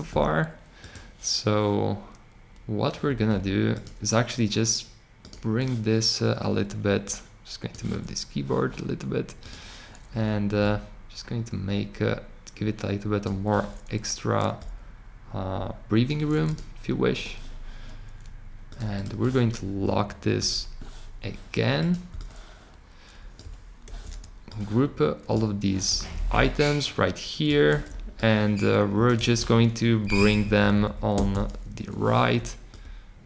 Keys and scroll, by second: 23.8 super+g, 25.8 super+g, 27.6 super+g, 29.1 super+g.